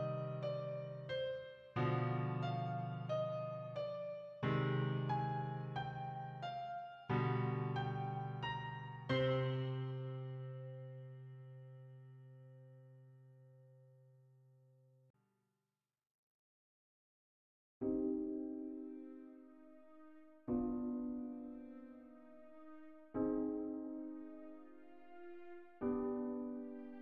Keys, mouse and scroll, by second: 2.5 q, 6.3 q, 7.7 click, 10.2 q, 12.4 click, 14.2 q, 16.6 q, 19.6 click, 23.6 ctrl+click, 26.0 Delete.